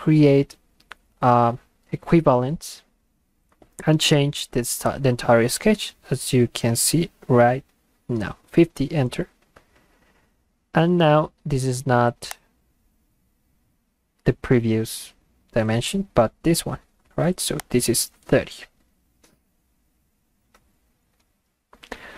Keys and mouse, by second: 8.5 Return, 12.3 click, 17.6 click, 21.5 Return.